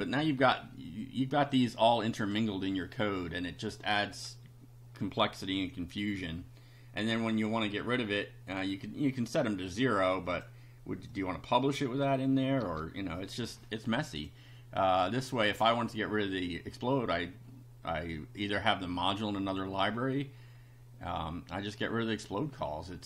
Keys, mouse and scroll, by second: 0.0-0.3 typing, 1.5-2.5 drag, 10.3 click, 11.1-12.3 drag, 12.7 BackSpace, 14.2 click, 19.0 click, 21.9 click.